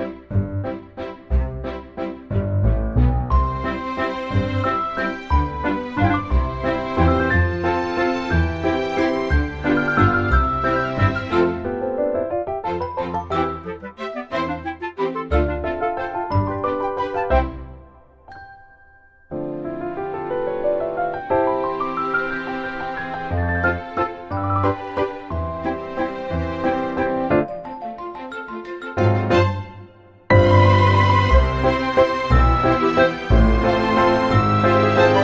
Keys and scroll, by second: 6.8 ctrl+c, 7.2 ctrl+v, 9.6 ctrl+c, 10.1 ctrl+z, 10.2 ctrl+z, 10.5 ctrl+shift+c, 10.7 ctrl+v, 13.8 typing, 35.0 Delete.